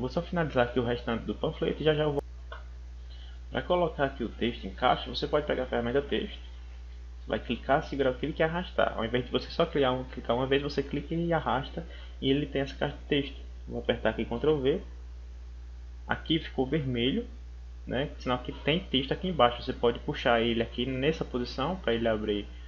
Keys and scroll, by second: 14.2 ctrl+v.